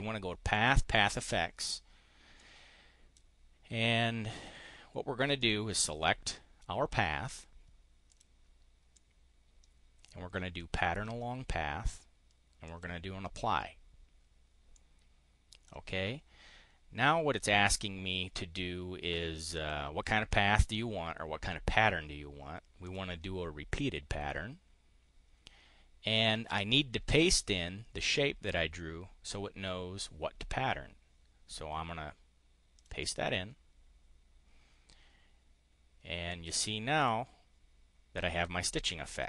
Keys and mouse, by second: 0.9 click, 2.3 click, 5.3 click, 8.0 click, 8.9-11.1 drag, 12.5 click, 14.7-15.7 drag, 19.5 click, 22.8 click, 32.7 click, 36.2 click, 36.7 click.